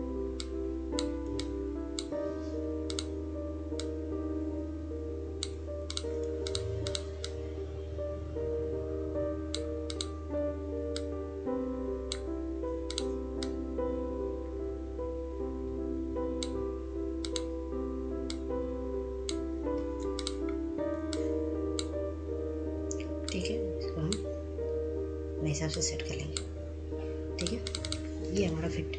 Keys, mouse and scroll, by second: 1.0 ctrl+space, 1.6-23.5 drag, 23.5 scroll down 1, 24.0-28.8 drag, 28.8-28.9 drag.